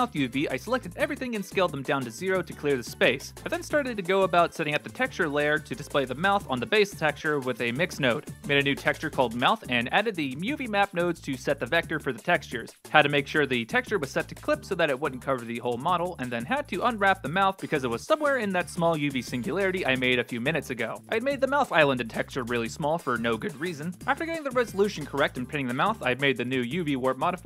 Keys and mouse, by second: 0.5 a, 0.6 s, 1.9 g, 3.3 shift+d, 3.6-4.4 drag, 4.8-5.3 middle drag, 5.4 click, 6.7-7.7 drag, 7.9 middle click, 8.7 click, 9.6 shift+d, 9.7 click, 11.0-11.6 drag, 11.9-12.7 drag, 12.8 ctrl+space, 13.2 middle click, 13.9 click, 16.2 3, 16.9 u, 18.6 r, 21.0 ctrl+space, 21.2 click, 23.4 middle click, 24.0 click, 26.8 shift+d.